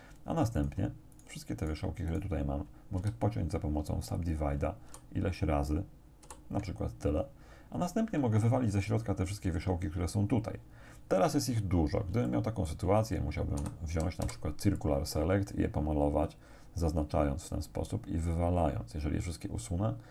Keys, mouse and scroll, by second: 0.6 shift+right click, 1.2 shift+right click, 1.6 shift+right click, 2.1 shift+right click, 3.0 shift+w, 4.2 click, 4.9 shift+r, 6.2 shift+r, 11.5-12.0 scroll up 2, 12.3 shift+click, 13.6 a, 14.2 c, 14.8-20.1 drag.